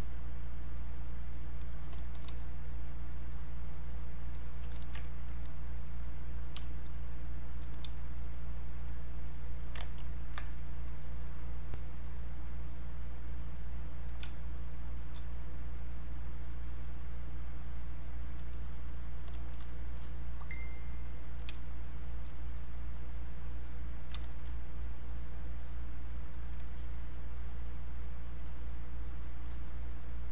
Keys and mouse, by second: 2.4 click, 4.7 alt+click, 5.0 ctrl+right click, 5.7 click, 6.6 space, 7.0 click, 7.1 space, 7.8 click, 9.8 ctrl+z, 10.5 click, 14.2 space, 14.6 click, 14.7 space, 15.3-19.1 drag, 20.0 click, 21.6 space, 22.5 click, 24.2 alt+click, 24.5 click, 26.7 alt+click, 27.4 click, 28.5 click, 29.5-30.3 drag.